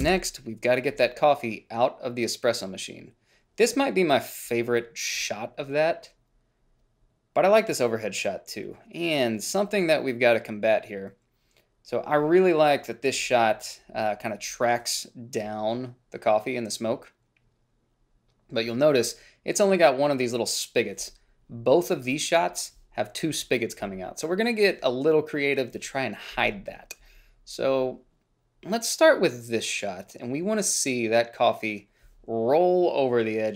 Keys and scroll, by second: 0.4 ctrl+b.